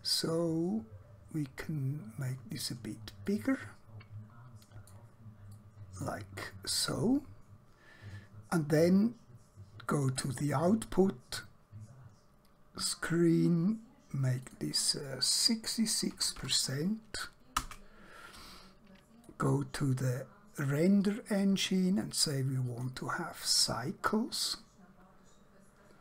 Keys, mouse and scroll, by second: 0.6-3.1 scroll up 1, 3.4 shift+middle click, 5.6 shift+middle click, 10.1 click, 14.5 click, 16.1 typing, 17.6 Return, 19.3 click.